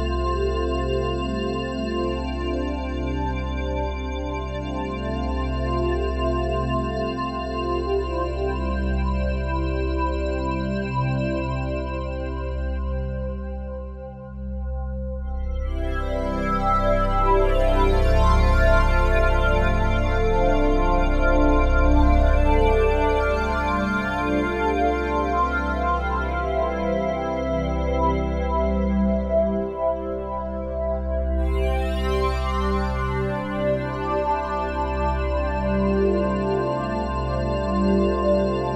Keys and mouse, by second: 3.8 typing, 5.0 typing, 10.1 g, 12.3 click, 13.3 typing, 15.2-17.1 shift+drag, 17.1 typing, 17.9 Escape, 18.7 typing, 20.7 shift+click, 22.4-22.9 typing, 23.8 shift+click, 24.7-25.1 ctrl+alt+drag, 25.5-26.0 alt+drag, 26.6 click, 27.6 typing, 28.4-29.8 drag, 29.8 typing, 31.5 click, 32.9-35.9 alt+drag, 36.0-38.5 drag.